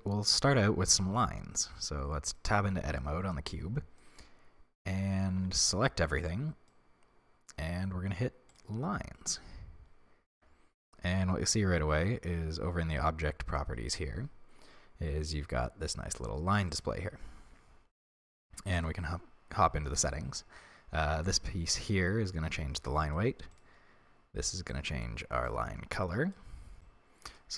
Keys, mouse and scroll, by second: 1.7 Tab, 3.9-4.3 scroll up 2, 5.2 a, 8.4 click, 10.3 Tab, 11.3-12.7 scroll down 1, 16.6 click, 18.7 click, 19.5-20.2 scroll down 1, 21.0-23.6 drag, 26.8-27.5 drag.